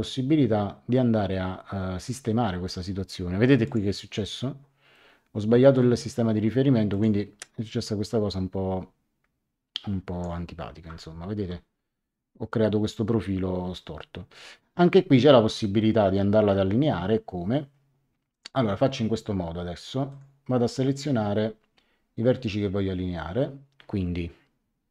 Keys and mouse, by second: 3.6 click, 4.9 middle click, 6.9 click, 11.3 Return, 18.3 click, 20.0 click.